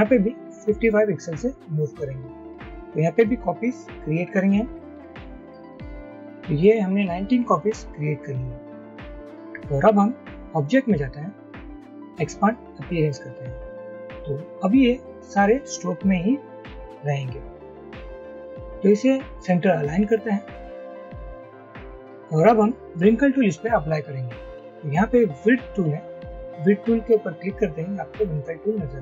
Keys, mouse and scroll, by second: 0.7-1.4 typing, 5.6 Up, 5.8-6.2 Up, 6.4 Up.